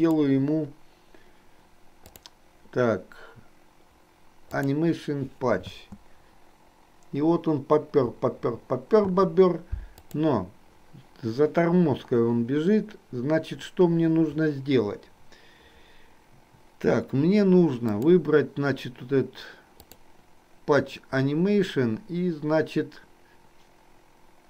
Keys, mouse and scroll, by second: 2.2 click, 4.5 click, 5.7 space, 9.2 space, 17.9 click, 19.9 click.